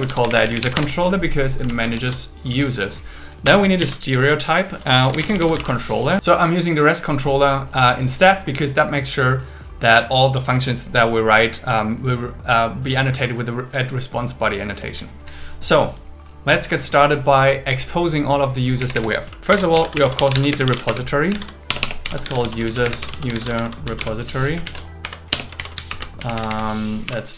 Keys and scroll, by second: 0.8 Return, 1.7 super+1, 3.4 Return, 3.8 alt+l, 5.2 shift+c, 18.8 Left, 19.5 shift+8, 20.5 space, 21.7 BackSpace, 22.8 shift+., 22.8 space, 23.6 shift+r, 24.6 alt+Left, 25.0 Right, 25.3 BackSpace, 25.6 shift+u, 25.9 super+Right, 26.2 Left.